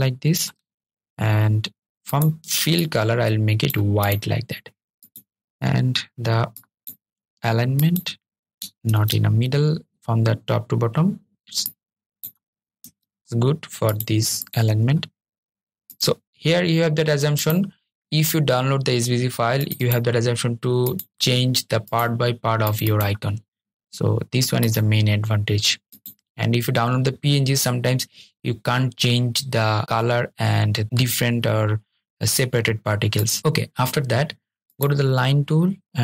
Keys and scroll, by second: 8.0 super+z, 13.2 super+z.